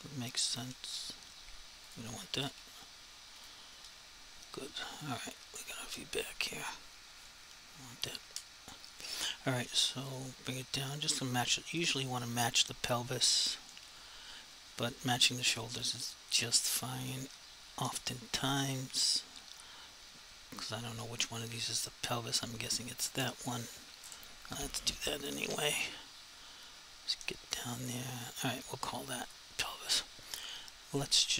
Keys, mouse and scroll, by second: 0.6 typing, 1.9 click, 2.4 z, 3.4 click, 3.8 F3, 5.0 click, 5.4 ctrl+r, 6.4 alt+z, 9.9 s, 11.0 click, 14.4 s, 15.8 click, 25.4 1, 27.4 s, 29.3 click.